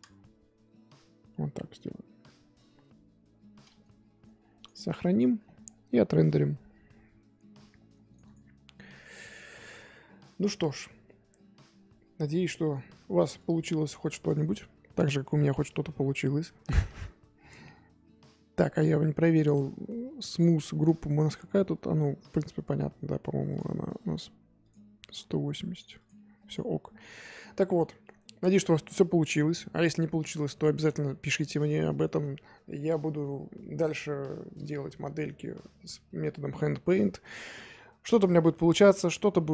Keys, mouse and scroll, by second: 4.5-23.5 drag, 24.6-39.5 drag.